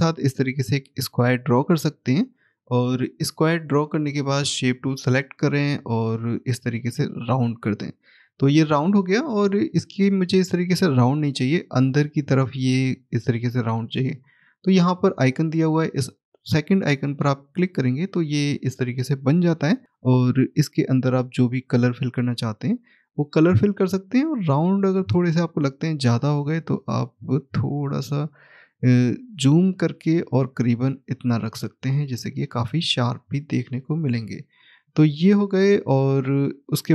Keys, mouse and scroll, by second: 3.9 click, 16.8 click, 20.2 click, 21.5 right click, 24.3 scroll up 1, 26.2 click, 28.2 scroll up 1, 29.6 click, 31.4 scroll down 1, 33.8 click, 35.4 scroll down 1, 36.2 click.